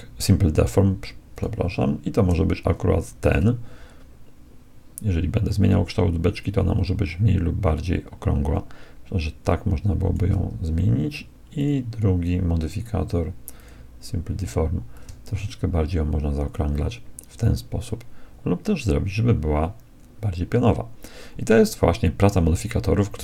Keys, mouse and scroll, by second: 1.3-3.1 drag, 3.3-5.3 drag, 11.7-13.3 drag, 13.7-17.0 drag.